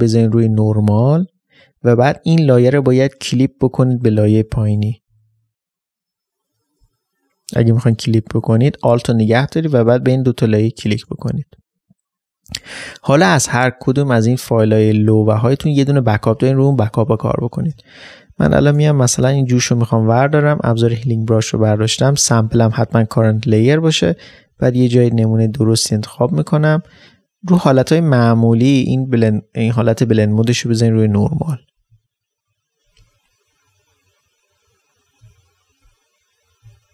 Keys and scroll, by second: 11.3 alt+space, 17.7 ctrl+space, 23.6 ctrl+space.